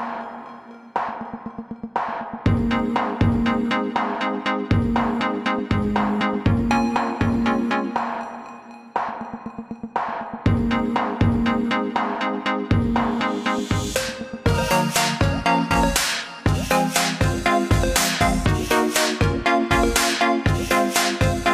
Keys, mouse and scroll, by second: 0.3 click, 2.5 click, 3.5 scroll down 1, 4.0 scroll down 1, 4.5 scroll up 1, 5.6 click, 8.2 scroll up 1, 9.0 click, 10.5 scroll down 1, 11.2 scroll down 1, 11.3 scroll up 1, 11.6 scroll down 1, 13.2 scroll up 1, 14.0 click, 15.2 click, 17.3 click, 18.9 click, 19.9-20.3 scroll down 2, 20.6 scroll up 1.